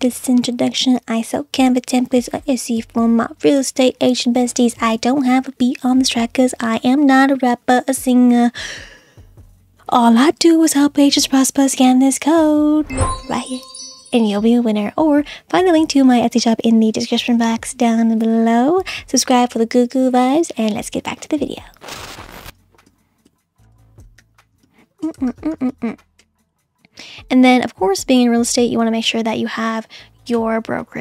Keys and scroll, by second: 22.9-26.2 typing.